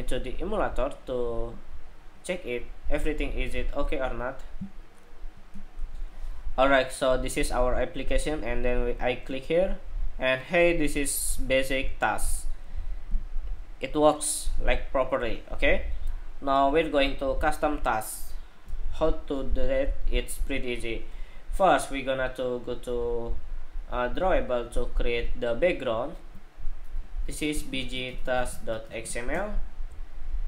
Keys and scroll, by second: 5.6 shift+super+2.